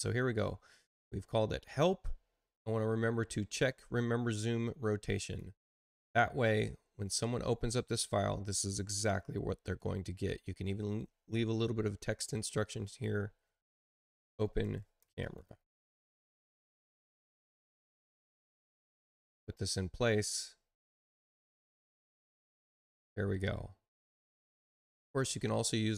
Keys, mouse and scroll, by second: 5.1 click, 12.8 click, 13.8-16.2 typing, 16.2 Return, 17.2 space, 17.5 click, 18.5-19.7 ctrl+drag, 20.9 click, 22.2 click, 23.5 space.